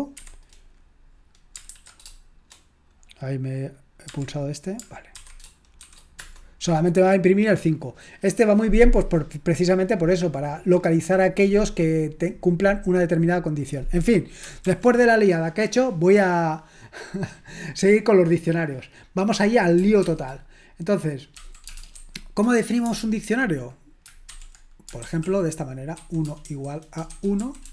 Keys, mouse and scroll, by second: 6.2 Return, 6.2 typing, 14.6 ctrl+l, 23.4-27.7 typing.